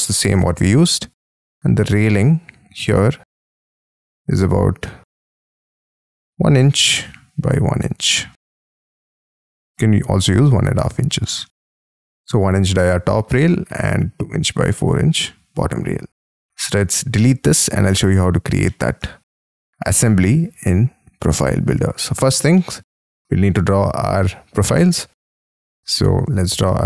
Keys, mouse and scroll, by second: 1.2 t, 2.0-6.6 scroll down 5, 6.6 t, 9.4 shift+space, 9.6-10.2 scroll down 10, 10.2 middle click, 10.8-11.1 scroll down 6, 11.3 Escape, 11.3 Escape, 12.1 middle click, 13.7-15.5 scroll up 20, 15.5-16.5 scroll down 15, 16.5 Delete, 18.6 middle click, 19.8-21.5 scroll up 30, 21.5 Escape, 22.0-22.4 scroll up 8, 22.5 middle click, 22.9 middle click, 23.4 r.